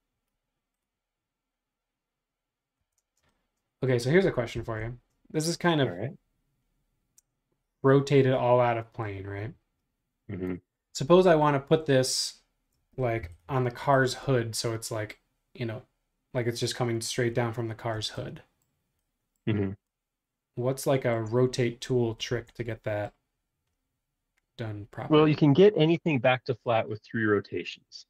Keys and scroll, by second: 2.8 Escape, 3.0 space, 13.3 m, 14.1 m, 17.9 space.